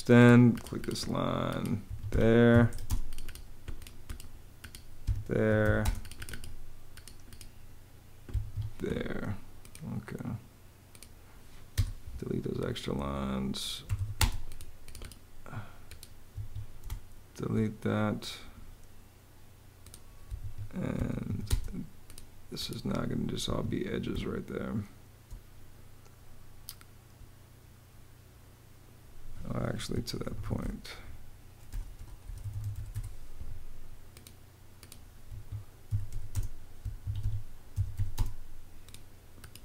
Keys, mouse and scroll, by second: 0.0-0.1 typing, 1.5 Escape, 2.0-2.9 typing, 4.7 Escape, 4.9-5.8 typing, 8.0 Escape, 9.1 Escape, 11.4 BackSpace, 13.3-14.2 typing, 16.0 Escape, 16.5 space, 20.1 Escape, 20.6 m, 20.9 a, 21.1 space, 23.1 Escape, 23.8 space, 29.4-32.9 typing, 33.5 Return, 35.0 Escape, 35.3-38.1 typing, 36.7 Escape.